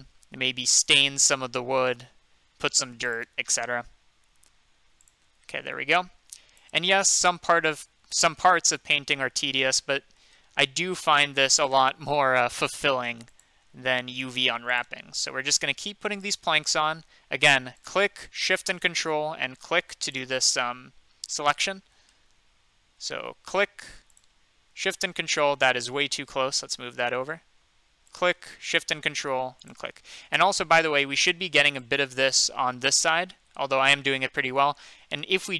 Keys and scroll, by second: 25.8 ctrl+z.